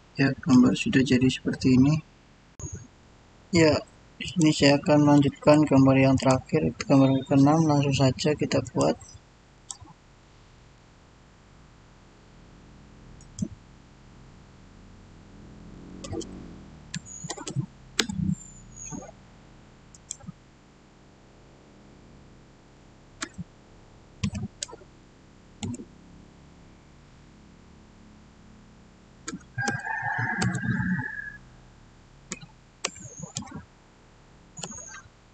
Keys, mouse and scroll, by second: 0.4-2.5 shift+middle drag, 2.5 click, 4.2 click, 6.4 click, 8.5 click, 10.1 middle click, 11.2-11.7 scroll up 1, 13.1 click, 15.4-17.3 typing, 16.8 Tab, 17.9 Return, 19.8 click, 23.1 2, 24.1 0, 25.5 Return, 29.1 Return, 29.2-29.6 typing, 30.3 Return, 32.2-33.2 typing, 34.5 Return.